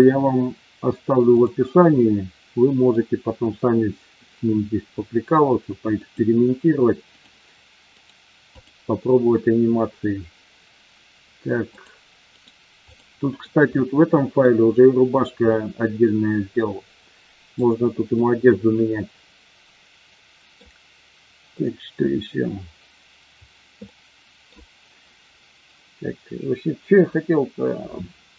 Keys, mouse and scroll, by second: 1.2 click, 2.0-3.0 middle drag, 5.9 click, 7.9 right click, 11.7 click, 12.3 right click, 13.9-14.3 middle drag, 15.5-17.6 middle drag, 18.1-20.5 middle drag, 23.8-24.5 middle drag.